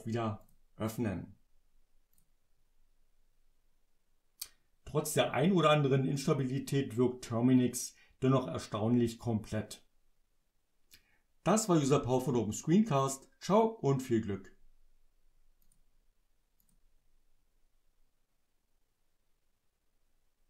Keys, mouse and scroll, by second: 0.5 click, 2.2 click, 15.7 click, 16.7 click.